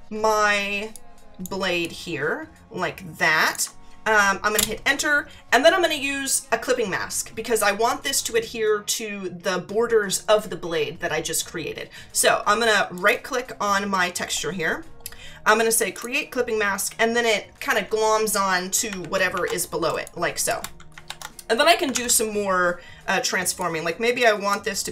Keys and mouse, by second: 0.9 alt+click, 4.6 Return, 12.9 right click, 16.0 click, 19.0 ctrl+=, 19.9 space, 20.0 click, 23.6 click, 24.8 click.